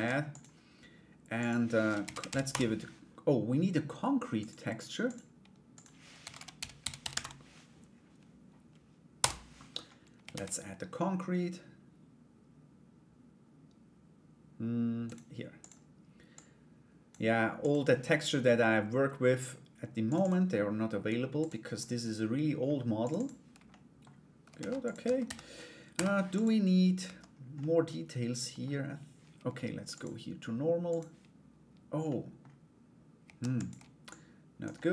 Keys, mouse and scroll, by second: 0.9-2.2 drag, 4.8 click, 5.4-9.1 drag, 9.9 shift+a, 15.9 click, 17.2 click, 23.3 middle click, 24.1 ctrl+a, 24.6 Tab, 24.8 a, 25.5 u, 26.6 Tab, 27.1-28.2 middle drag, 29.6-30.7 drag, 31.7 middle click, 33.0 shift+d, 33.7 click, 34.3 middle click.